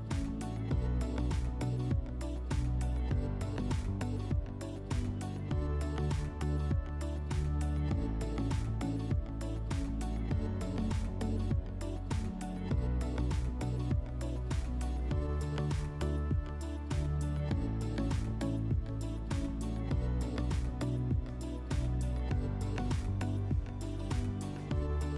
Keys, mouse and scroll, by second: 0.7 click, 1.5 click, 3.8 click, 4.4 click, 6.4 click, 8.4 click, 14.2 click, 20.8 click, 22.8 shift+click, 23.6 click, 24.8 click.